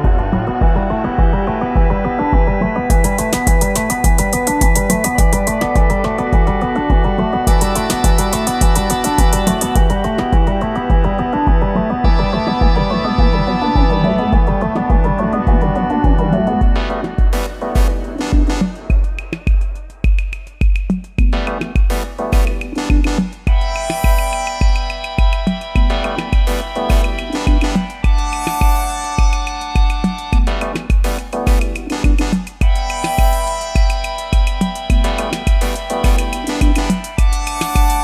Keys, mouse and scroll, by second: 4.5 [, 4.6 [, 4.9 double click, 8.0 [, 8.2 double click, 31.6 double click.